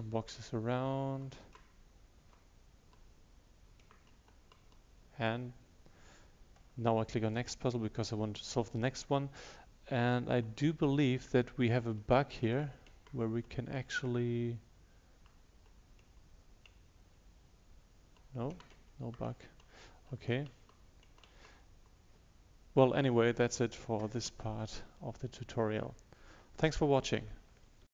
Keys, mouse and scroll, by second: 4.9 Right, 4.9 Left, 4.9 Down, 7.4 click, 10.3 Left, 10.8 Down, 11.9 Right, 12.5 Right, 12.8 Right, 13.0 Up, 15.2 Up, 15.5 Right, 16.1 Right, 17.3 Down, 17.8 Down.